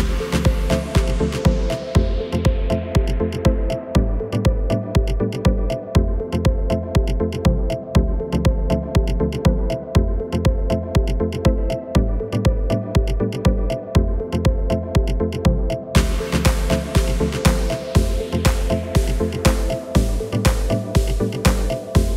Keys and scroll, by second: 5.7 shift+e, 9.7 Tab, 17.9 Tab.